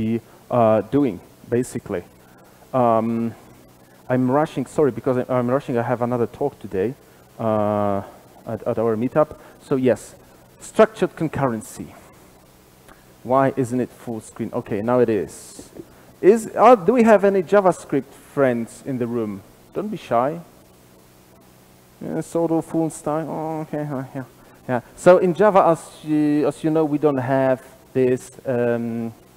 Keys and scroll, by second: 2.7 alt+super+z.